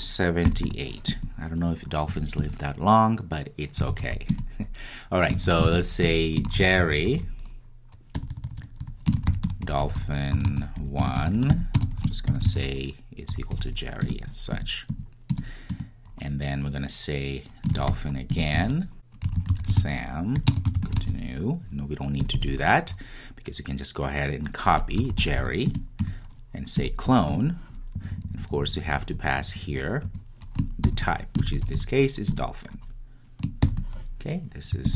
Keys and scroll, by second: 4.3 Return, 4.5 Return, 14.1 Return, 18.4 Return, 25.7 Return, 30.8 Return, 32.4 Return.